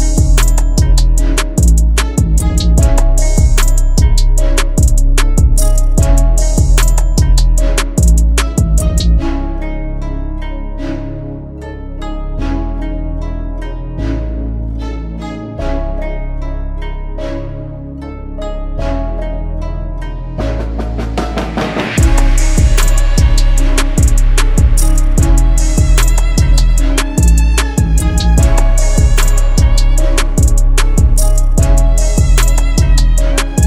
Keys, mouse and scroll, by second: 1.9 double click, 3.0 click, 5.3 6, 5.5 ctrl+d, 13.5 double click, 15.4 [, 15.9 [, 18.2 double click, 22.1 [, 22.3 [, 23.5 double click, 27.7 double click.